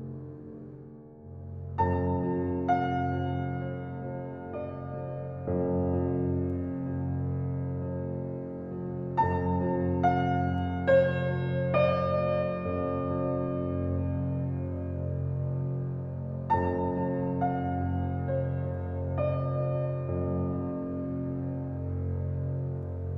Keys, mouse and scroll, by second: 0.7 shift+click, 4.4 alt+right click, 4.7 alt+click, 5.3 alt+right click, 5.6 alt+click, 6.1 alt+middle click, 6.4 alt+click, 6.8 alt+right click, 7.1 alt+middle click, 9.0 click, 11.1 shift+click, 12.2 1, 12.9 alt+click, 14.0 alt+scroll down 1, 14.3 alt+click, 15.1 right click, 16.0 alt+click, 16.5 right click, 16.8 -, 17.4 click, 22.5 right click.